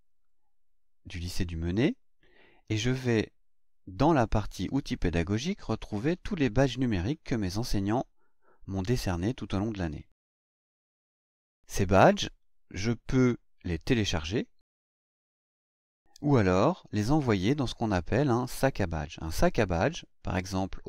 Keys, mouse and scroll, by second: 4.6 click, 6.1 click.